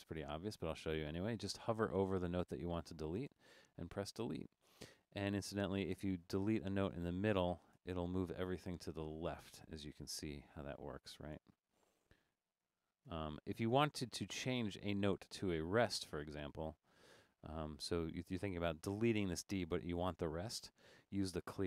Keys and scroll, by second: 0.2 Left, 0.5 Right, 1.8 Right, 2.1 Left, 3.3 BackSpace, 4.5 Right, 4.7 Right, 5.4 Right, 6.1 Right, 6.5 Left, 7.8 BackSpace, 9.6 BackSpace, 10.6 Left, 11.4 BackSpace, 11.8 Left, 12.2 BackSpace, 12.7 BackSpace, 13.1 BackSpace, 13.6 Right, 13.6 Right, 14.3 Left, 15.1 Right, 15.3 Right, 15.8 Left, 16.0 Left, 16.1 Left, 16.3 Left, 16.4 Left, 16.6 Left, 16.8 Left, 16.9 Left, 18.0 Right.